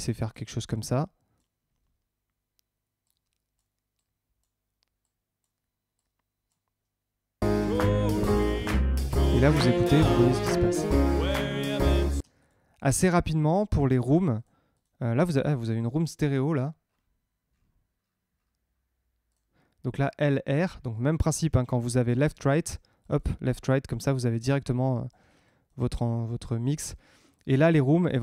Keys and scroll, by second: 7.4 space, 12.1 space, 15.7 Tab, 20.9 Tab.